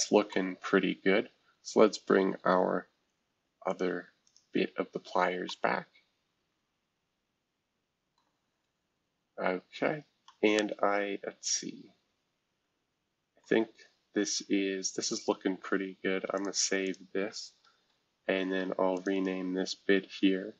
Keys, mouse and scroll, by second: 0.3 middle click, 0.4-1.8 scroll down 2, 1.8 scroll down 1, 2.4-3.0 scroll up 3, 3.7 click, 4.6-5.0 scroll down 2, 5.0 scroll up 1, 5.5-9.0 middle drag, 8.3-9.0 scroll down 2, 9.8 scroll up 1, 13.4-15.0 middle drag, 15.0 click, 16.3 click, 16.8 click, 17.6 ctrl+s.